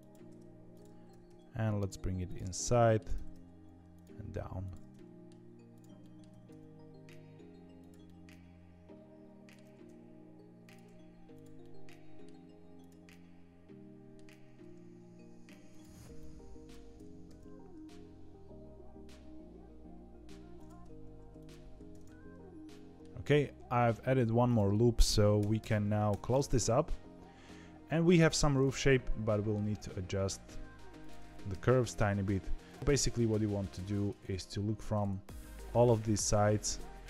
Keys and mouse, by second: 0.4 1, 0.6 click, 1.0 g, 2.4 middle click, 3.1 g, 4.9 middle click, 5.7 click, 6.0 middle click, 6.2 g, 8.0-9.5 middle drag, 9.6 g, 11.3 click, 11.5 middle click, 12.7 click, 13.0-14.1 middle drag, 14.4 g, 16.9 g, 21.0 ctrl+r, 22.0 middle click, 24.2 2, 24.4 click, 25.3 f, 25.6 f, 26.3-28.1 middle drag, 28.2 1, 28.5 click, 28.8 middle click, 29.6 g, 31.4 KP_3, 32.8 g, 36.9 g.